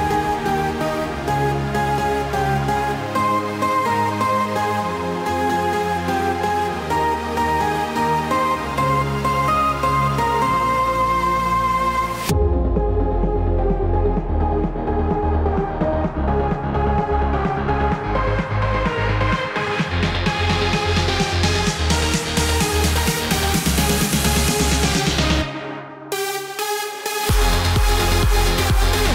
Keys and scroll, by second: 9.3 ctrl+BackSpace.